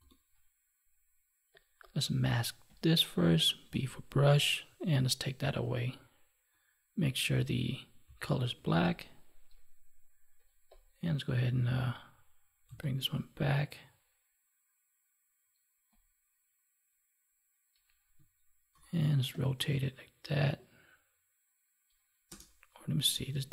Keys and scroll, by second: 18.6 ctrl+t, 23.1 ctrl+z.